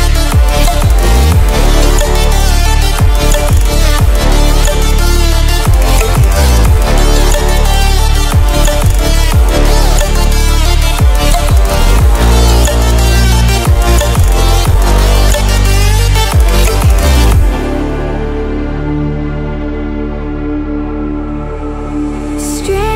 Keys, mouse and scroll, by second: 1.3 click, 4.1 click, 10.6 click, 12.2 ctrl+w, 13.8 ctrl+w, 14.3 click.